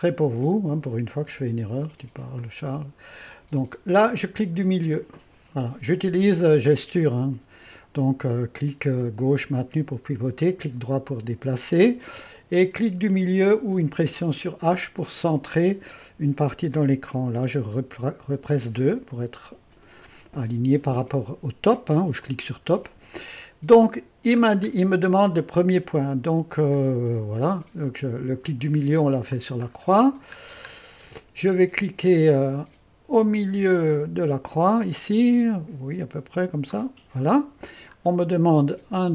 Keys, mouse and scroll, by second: 0.6 middle click, 2.4 click, 5.0 middle click, 9.2 middle click, 9.6 click, 9.8 click, 10.8 click, 11.2-13.0 drag, 14.0 h, 18.3-19.1 typing, 22.2-24.0 drag, 24.0-25.1 middle drag, 25.6 scroll up 2, 25.8-29.0 scroll down 2, 29.0 middle click, 29.7-33.7 scroll up 2, 36.7 click, 38.0 scroll down 2, 38.1-39.1 middle drag.